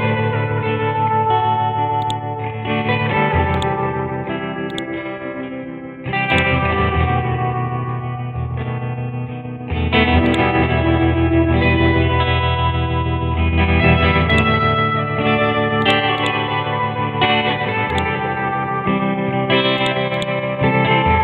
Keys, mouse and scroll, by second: 2.0-6.3 drag, 7.0-7.7 scroll up 1, 7.7-8.7 scroll down 1, 10.2-19.4 drag, 19.4 Delete, 19.8-21.2 drag.